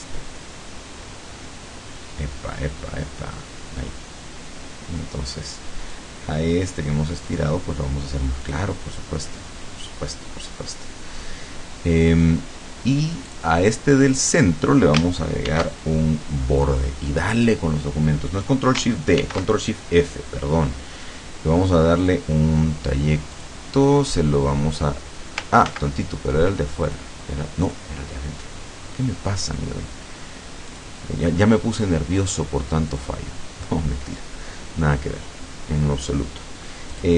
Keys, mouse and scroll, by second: 7.3 click, 8.5 click, 13.3 click, 14.1 click, 15.5 ctrl+shift+d, 17.5 click, 19.2 ctrl+shift+f, 22.1 click, 23.4 click, 25.7 ctrl+z, 26.9 click, 27.7 click, 30.8 click, 33.0 click, 37.0 click.